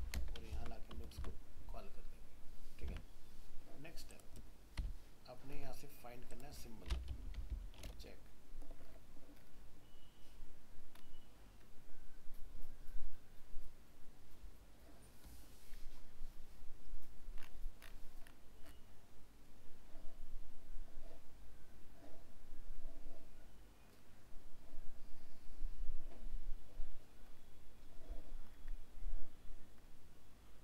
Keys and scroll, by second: 0.5 ctrl+v, 2.9 alt+Tab.